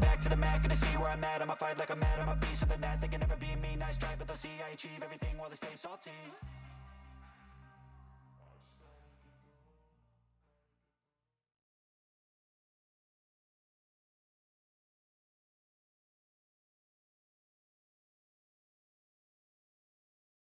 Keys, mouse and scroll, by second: 2.9 typing, 4.1 ctrl+shift+s, 9.7 1, 16.9 typing.